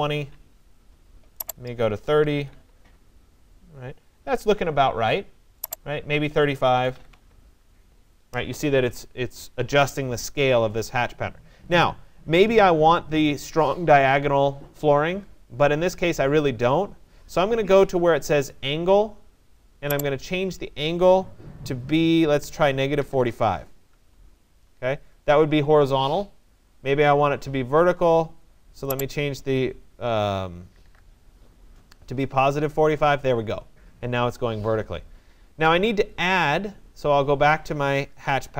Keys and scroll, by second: 0.0-0.1 typing, 0.3 Tab, 2.0-2.9 typing, 6.3 3, 7.0 5, 7.1 Tab, 22.0-23.6 typing, 23.9 Tab, 30.5 4, 30.9 5, 32.3 Tab, 38.1 Return.